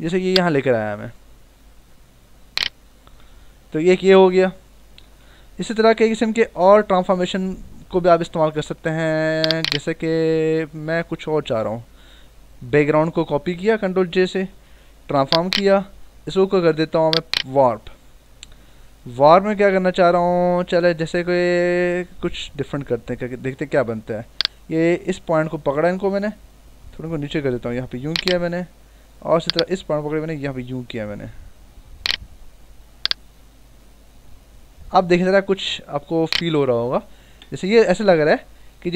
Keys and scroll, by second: 5.2 ctrl+-, 5.8 ctrl+=, 12.6 ctrl+j, 14.8 ctrl+t, 37.4 Return.